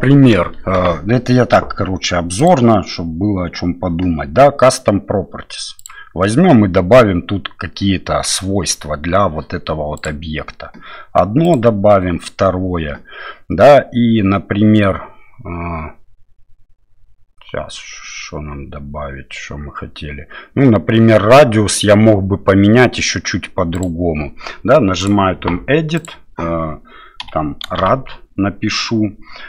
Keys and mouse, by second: 2.4 click, 5.8 click, 10.0 click, 23.8 click, 25.2-29.4 drag.